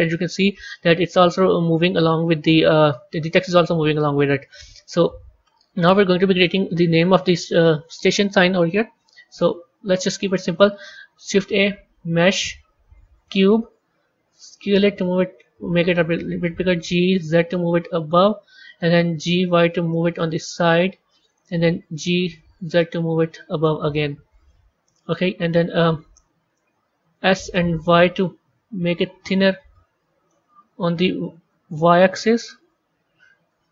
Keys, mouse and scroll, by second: 4.7-7.7 middle drag, 8.5 KP_3, 9.7-10.5 scroll down 2, 10.5 shift+a, 14.4 s, 16.6 g, 19.0 g, 21.7 g, 23.9-26.9 middle drag, 27.0 s, 29.5-30.7 middle drag, 30.7 s.